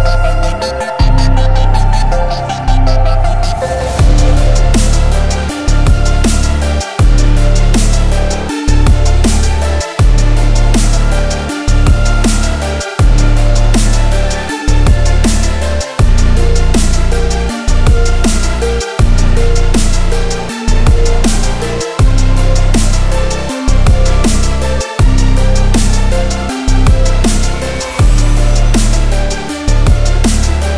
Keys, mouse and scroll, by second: 0.0 middle click, 0.2-0.6 scroll up 2, 0.6 click, 0.9-1.9 middle drag, 1.9 alt+x, 2.4-3.1 scroll down 2, 3.1 click, 3.7 click, 4.8 click, 5.3-6.9 middle drag, 6.9-7.8 scroll up 2, 7.8-8.6 middle drag, 8.6 click, 8.9 shift+middle click, 9.4 Tab, 16.3 middle click, 16.5 Tab, 16.8 click, 17.8-18.8 drag, 18.8-20.6 right drag, 20.6 middle click, 21.0-21.4 scroll up 1, 21.4 click, 21.8 middle click, 22.0 Tab, 22.8-24.4 middle drag, 24.4 scroll up 2, 25.0 click, 26.4 middle click, 26.9 Tab, 27.4 click, 29.2-29.7 shift+middle drag, 29.7 r.